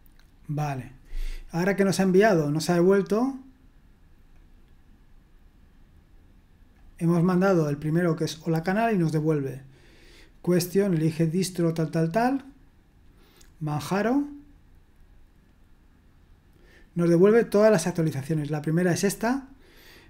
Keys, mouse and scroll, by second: 4.3-20.0 drag.